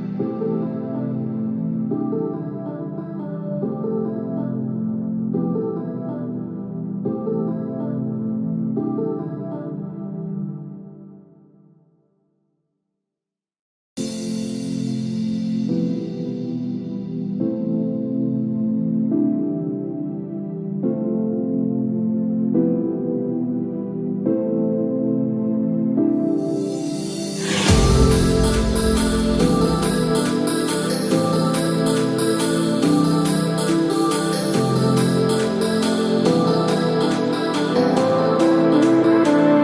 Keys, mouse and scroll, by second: 7.7-8.3 scroll up 2, 8.3-9.2 scroll down 1, 10.9-11.3 scroll down 1, 12.5 click, 16.8 click, 26.3 shift+click, 30.6 ctrl+click.